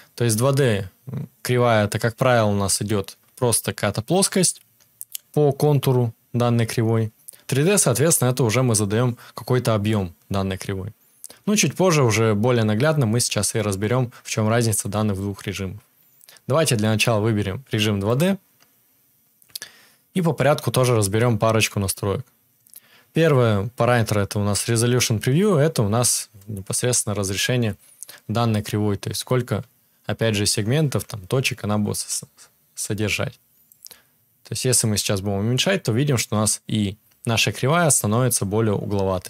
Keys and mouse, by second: 18.1-33.8 middle drag, 33.8-39.2 drag.